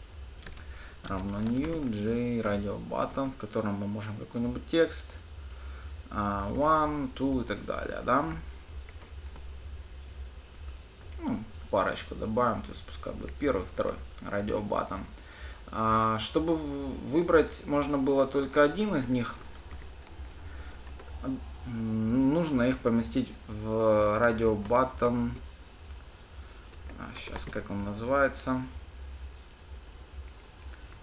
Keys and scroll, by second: 2.8 Return, 10.8 ctrl+d.